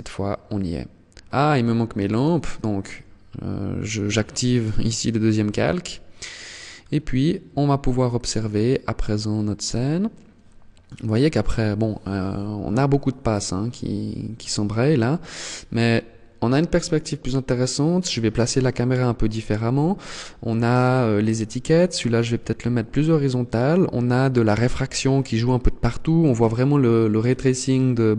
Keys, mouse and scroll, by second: 0.5 shift+click, 4.4 scroll up 1, 6.5 scroll up 2.